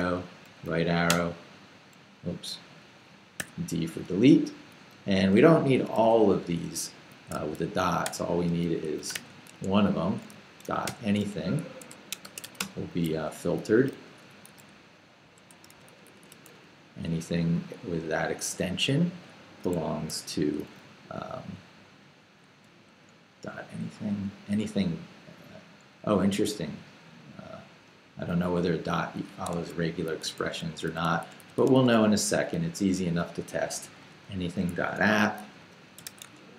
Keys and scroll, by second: 0.0 l, 1.1 Return, 2.1 k, 2.5 h, 3.4 d, 5.4 j, 7.2-10.9 typing, 11.8 shift+Escape, 12.0-14.5 typing, 16.4 i, 17.1 shift+i, 18.8 shift+8, 20.0 shift+Escape, 20.4 j, 22.5 k, 22.9 l, 29.5 Escape, 29.8 j, 30.4 h, 30.7 x, 33.0-36.5 typing, 34.8 shift+Escape.